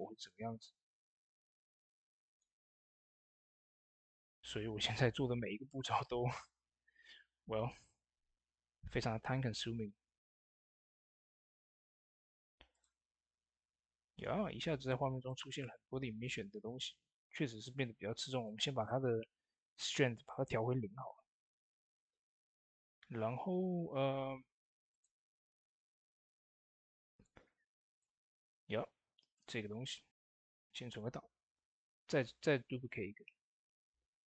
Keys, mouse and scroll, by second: 2.1 click, 2.1 click, 12.5 click, 12.6 click, 15.0 click, 18.2 click, 18.2 click, 23.4 click, 23.5 scroll up 1, 24.7 click, 30.1 ctrl+s, 31.2 shift+d.